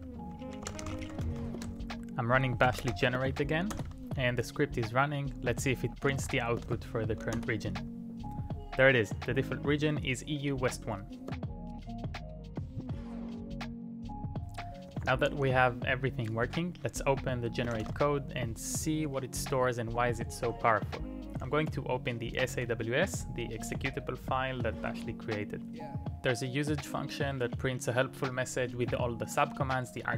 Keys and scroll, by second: 0.0-3.4 typing, 3.7 Return, 6.1 typing, 7.4 Return.